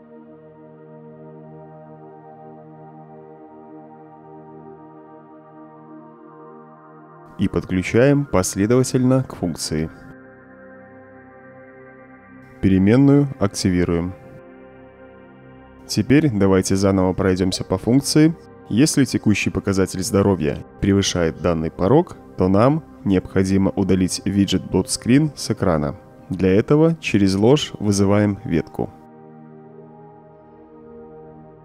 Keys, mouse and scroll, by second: 0.0-0.3 typing, 0.6 Return, 2.3 click, 3.6 click, 5.3-6.1 right drag, 8.2-9.9 alt+drag, 10.6-11.1 drag, 11.6-12.1 drag, 12.7 click, 13.5 click, 15.0 click, 15.5-16.0 right drag, 16.4 click, 16.6-17.4 right drag, 17.7 click, 18.2 right click, 24.2-28.0 drag, 29.3 b, 29.5 Return, 31.2-31.6 drag.